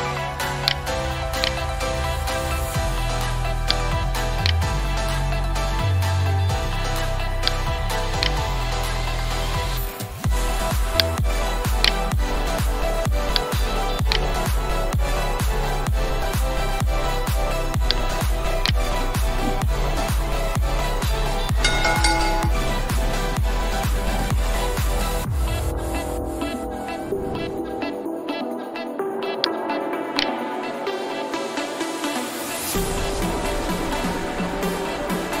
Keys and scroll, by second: 14.7 alt+Return.